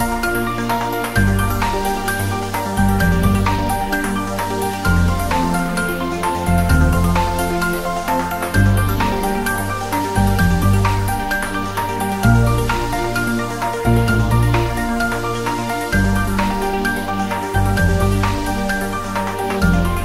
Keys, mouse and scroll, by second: 0.8 click, 1.8 click, 2.5 g, 3.1 z, 4.1 Up, 5.3 Right, 10.2 Return, 10.6-11.4 typing, 11.1 scroll down 1, 18.4 scroll down 1, 19.8 click.